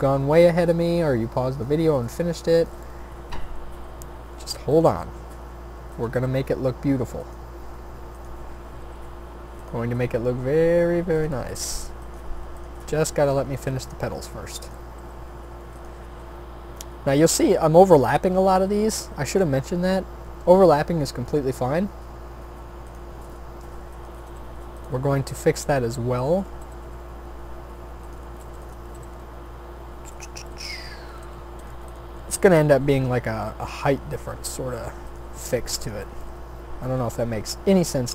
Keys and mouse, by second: 0.2 s, 0.9 e, 1.9 s, 3.2 click, 3.8 e, 5.3 s, 6.1 g, 7.6 e, 8.8 r, 9.8 s, 13.7 shift+d, 14.9 r, 16.1 e, 19.4 e, 21.3 e, 23.2 s, 24.3 g, 26.6 g, 28.4 a, 28.9 g, 31.2 a, 32.8 e, 34.2 s, 35.4 g.